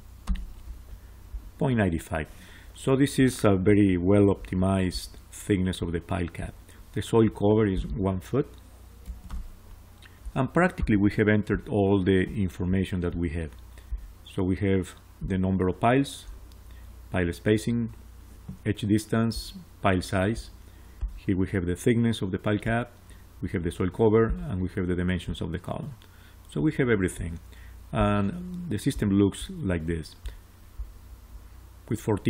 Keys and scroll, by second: 0.1 Return, 8.9 1, 9.2 Return.